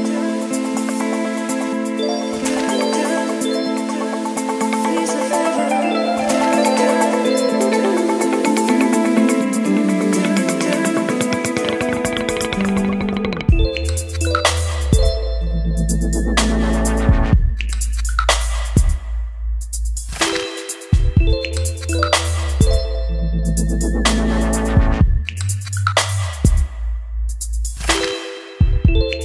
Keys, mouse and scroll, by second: 0.0-0.7 scroll down 2, 0.7 click, 1.8 ctrl+x, 2.2 click, 3.1 ctrl+v, 3.7 click, 4.4 Return, 5.5-7.5 drag, 7.5-8.1 scroll down 2, 8.1-8.8 scroll down 1, 8.8-14.0 drag, 14.0-15.2 scroll down 2, 15.2-15.9 scroll down 1, 15.9-16.6 scroll down 1, 16.6 click, 17.1-17.8 scroll down 2, 17.8-19.0 drag, 19.5-21.1 drag, 21.9-29.2 drag.